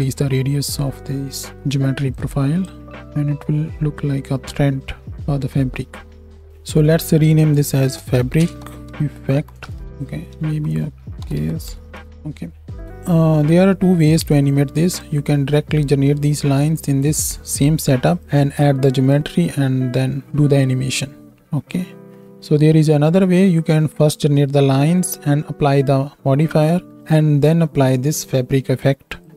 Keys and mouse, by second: 2.2 click, 2.2 middle click, 2.2 right click, 6.4-9.8 drag, 6.4-9.8 middle drag, 6.4-9.8 right drag, 9.7 f.